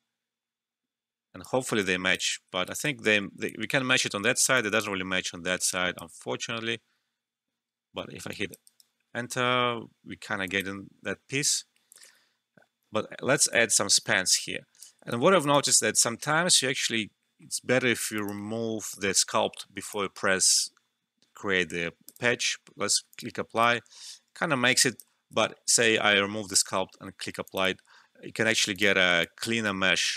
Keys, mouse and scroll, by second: 2.6 alt+right click, 3.4 alt+click, 4.5 alt+click, 5.7 alt+click, 7.6 Return, 8.3 alt+click, 8.6 alt+right click, 10.4 alt+click, 12.0 ctrl+z, 13.5-15.1 drag, 15.1 alt+click, 15.5 alt+right click, 15.9 alt+middle click, 16.9-18.1 scroll up 1, 18.1 click, 18.9-22.0 alt+drag, 23.6-25.2 alt+drag, 25.2 ctrl+z, 26.5 click, 29.1-30.1 alt+drag.